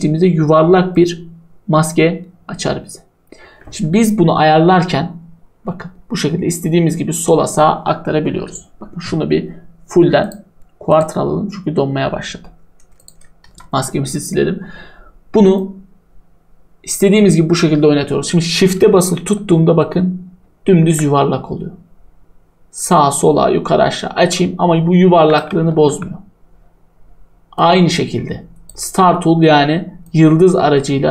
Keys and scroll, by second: 13.4 Delete, 25.8 ctrl+z.